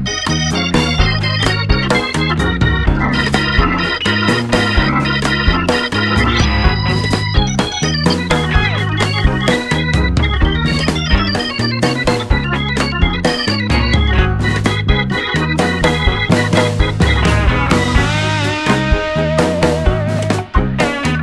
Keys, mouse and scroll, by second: 0.7 s, 2.2 KP_7, 3.0 middle click, 3.4 middle click, 4.4-5.6 middle drag, 5.7 middle click, 5.9 s, 6.1 middle click, 11.1-13.0 middle drag, 11.9 s, 14.1-16.1 middle drag, 16.1 click, 18.2 click.